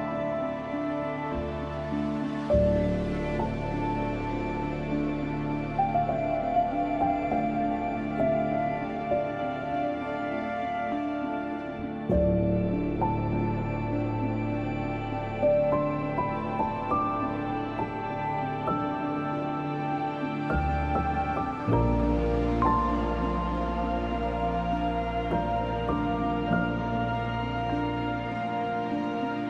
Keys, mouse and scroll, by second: 0.8 scroll down 1, 1.7 scroll down 1, 3.1-18.5 drag, 18.5 ctrl+z, 19.1-24.6 drag, 24.6 z, 24.8-29.4 drag.